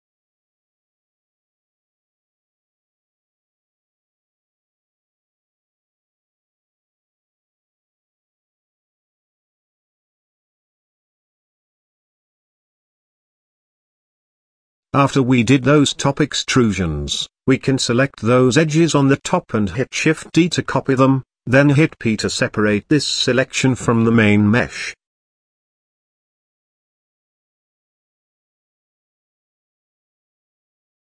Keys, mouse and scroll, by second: 2.9 Tab, 3.3-5.3 shift+middle drag, 5.3 click, 5.4-6.1 right drag, 6.1-11.7 middle drag, 11.7 drag, 11.9 shift+middle drag, 12.2 scroll up 2, 12.2 scroll down 1, 12.4 click, 12.6 Tab, 12.9-13.5 scroll up 1, 13.5 click, 14.6 ctrl+z, 15.6 click, 16.8 shift+click, 17.3 shift+click, 18.1 shift+click, 18.9 middle click, 19.7 shift+d, 22.5 p, 23.2 Tab, 23.8 click, 24.6 f, 24.9 g, 26.0-27.3 middle drag, 27.3 Tab, 28.3 click, 28.9 click, 29.2 x, 30.6 middle click.